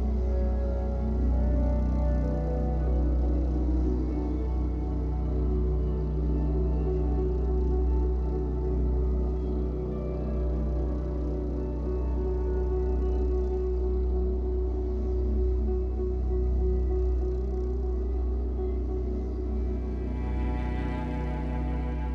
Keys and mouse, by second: 0.5 click, 0.9 click, 1.8 click, 2.3 click, 2.5 click, 3.3 3, 3.7 ctrl+alt+click, 4.5 ctrl+s, 5.0-6.0 ctrl+alt+drag, 9.3-10.5 drag, 11.3 alt+click, 12.7-20.0 alt+shift+drag, 20.5 alt+a, 20.8 ctrl+alt+click, 21.4 click, 21.4 typing.